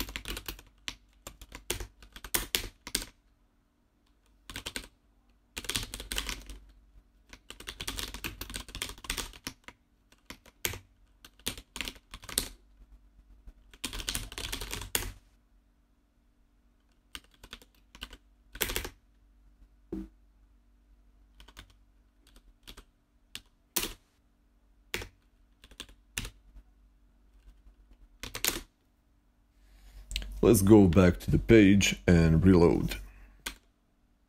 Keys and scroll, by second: 0.0-2.8 typing, 1.5 Escape, 4.1-8.6 typing, 9.9-14.9 typing, 10.5 Escape, 16.8-19.1 typing, 21.0-23.7 typing, 24.8 Escape, 24.9-28.8 typing, 31.5 ctrl+Left, 33.3 super+r.